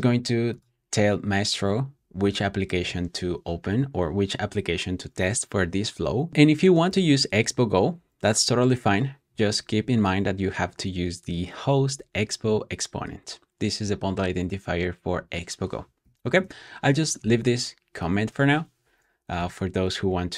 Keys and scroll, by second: 7.9 super+v, 17.4 Escape, 18.5 Escape, 19.3 typing.